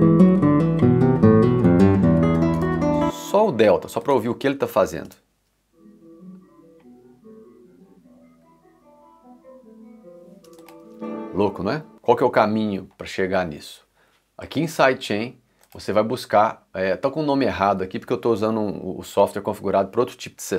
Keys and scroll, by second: 2.6 space, 2.8 s, 5.1 space, 10.5 space, 12.3 s.